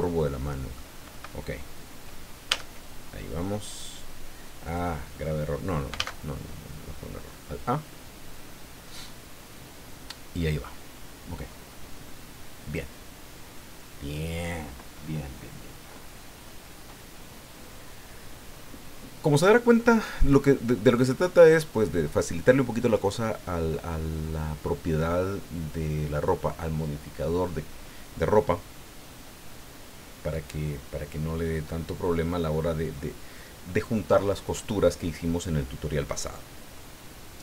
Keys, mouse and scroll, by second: 0.2 middle click, 2.5 Tab, 4.6 click, 5.9 alt+a.